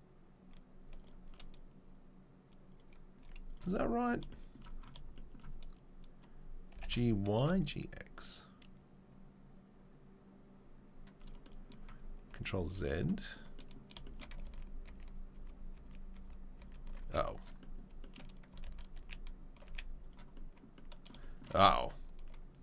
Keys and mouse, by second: 2.7 click, 2.7-14.1 middle drag, 4.0 z, 6.7 g, 12.7 ctrl+z, 14.9 ctrl+z, 15.3 ctrl+z, 15.7 ctrl+z, 16.1 ctrl+z, 16.6 ctrl+z, 18.6 ctrl+z, 18.9 ctrl+z, 18.9-22.6 ctrl+middle drag, 19.6 z.